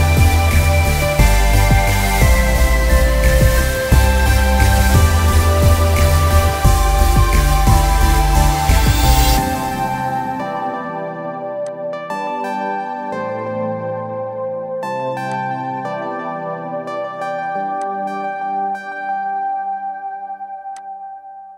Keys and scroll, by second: 19.5 ctrl+z.